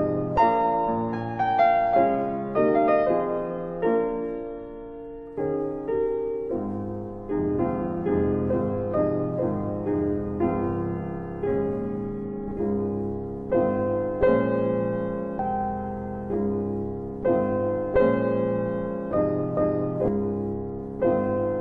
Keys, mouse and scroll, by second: 2.2 click, 3.4 click, 13.7 click.